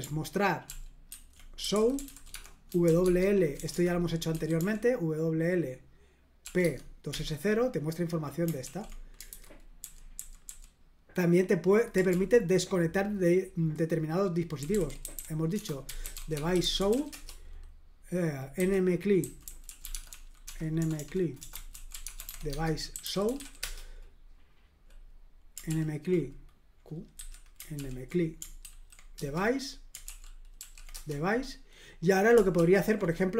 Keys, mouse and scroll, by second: 0.6 ctrl+p, 1.1 ctrl+w, 1.4-4.8 typing, 6.4 typing, 6.6 Tab, 7.1 Return, 8.6 ctrl+l, 9.3 super+h, 9.8-10.4 typing, 12.1 super+l, 14.3-17.4 typing, 18.5-23.8 typing, 25.7 ctrl+p, 27.1 q, 27.8 ctrl+p, 28.6 ctrl+w, 29.2 Return, 30.0 ctrl+l, 30.6 ctrl+p, 30.9 Return, 32.5 ctrl+p.